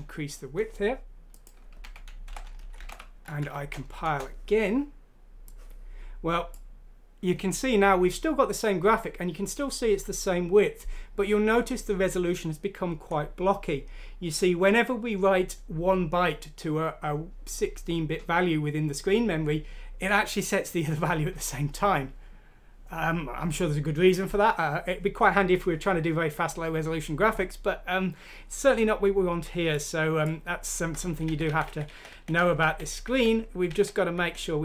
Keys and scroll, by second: 1.8 1, 2.3 Delete, 2.6 Down, 2.8 Delete, 3.4 F6, 4.0 Return, 31.2 ctrl+z, 31.4 ctrl+z, 31.6 ctrl+z, 31.8 ctrl+z, 32.3 ctrl+z, 32.6 ctrl+z, 33.0 ctrl+z, 33.7 ctrl+z, 34.1 ctrl+z.